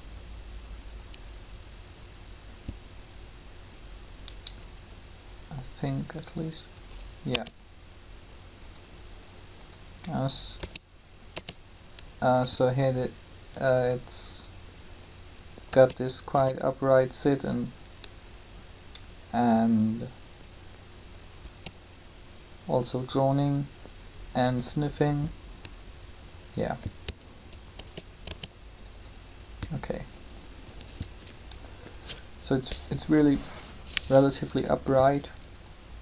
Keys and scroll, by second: 7.3 space, 10.5 space, 15.6 space, 21.4 space, 27.8 space.